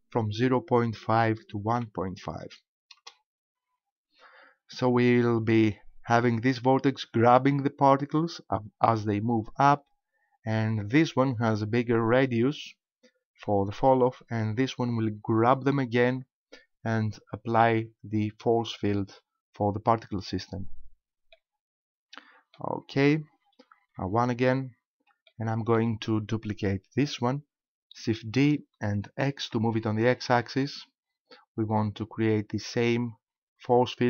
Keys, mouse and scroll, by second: 6.3 right click, 10.5 right click, 21.3 middle click, 23.7 KP_1, 25.3 shift+middle click, 28.3 shift+d.